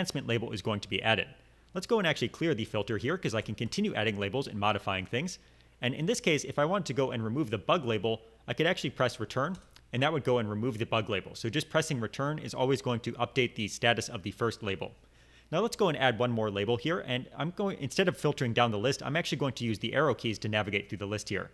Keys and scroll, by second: 2.6 BackSpace, 2.8 BackSpace, 2.9 BackSpace, 9.5 Return, 20.0 Page_Down, 20.6 Page_Down.